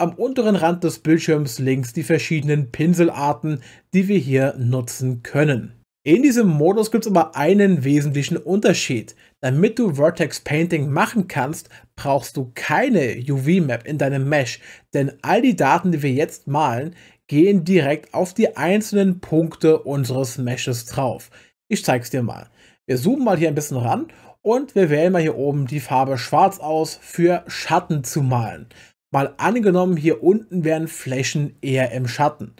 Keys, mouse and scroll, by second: 25.7 click.